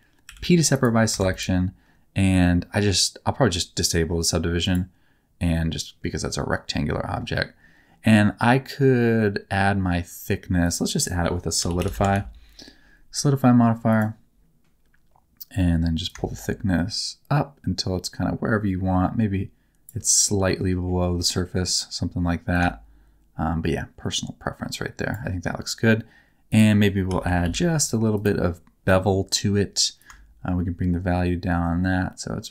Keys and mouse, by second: 0.2 p, 1.1 Tab, 4.6 click, 10.6-13.9 drag, 16.2-19.9 shift+drag, 20.2 middle click, 22.5-25.1 shift+drag, 26.6-28.2 drag, 30.1-32.5 shift+drag.